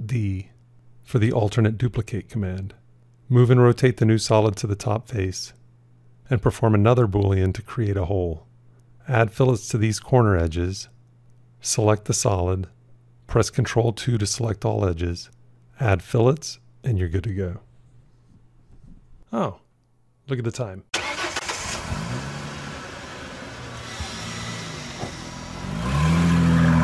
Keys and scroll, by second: 7.4 q, 12.8 ctrl+2.